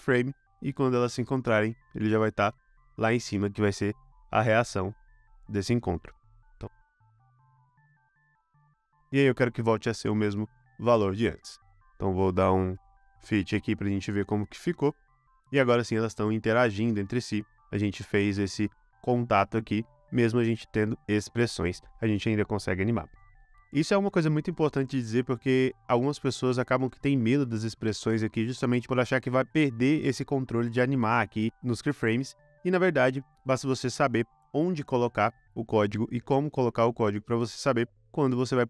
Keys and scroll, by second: 8.4 super+c, 8.4 super+v, 23.0 space.